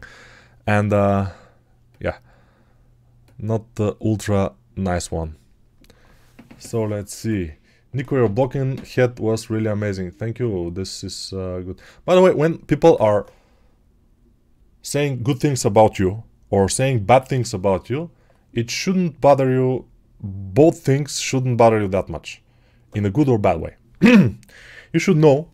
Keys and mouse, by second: 1.8 click, 3.1-25.5 drag.